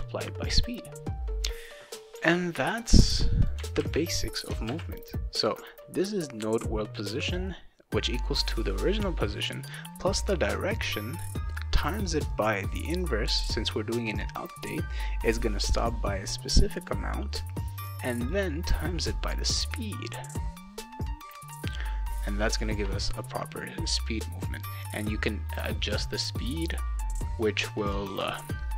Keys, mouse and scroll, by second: 2.2-3.5 drag, 3.8 ctrl+c, 4.4 click, 4.7 ctrl+v, 12.3 click, 16.5 click, 16.7 click, 18.1 click, 18.2 click.